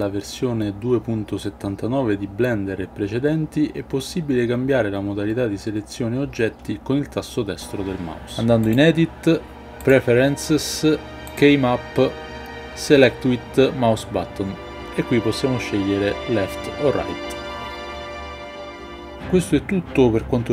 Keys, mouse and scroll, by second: 8.7-10.2 drag.